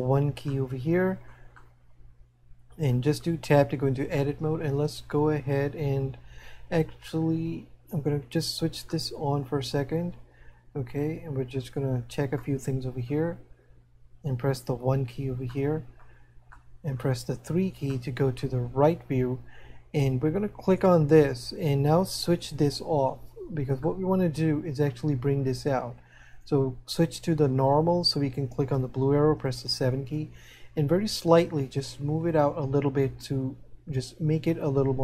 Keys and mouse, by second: 0.9 middle click, 8.9 middle click, 12.3 middle click, 15.6 middle click, 16.9 middle click, 18.2 middle click, 24.0 middle click, 32.1 click.